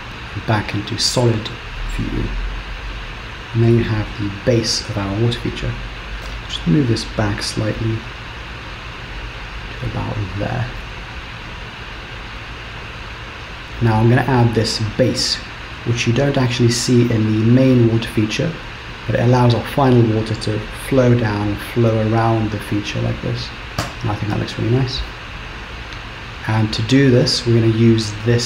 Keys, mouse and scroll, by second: 0.1 Tab, 0.1 scroll down 1, 0.1 z, 1.5-2.0 scroll down 4, 2.0 middle click, 4.2-4.6 scroll up 1, 6.3 KP_3, 6.8-7.2 scroll up 2, 7.8 g, 10.8 middle click.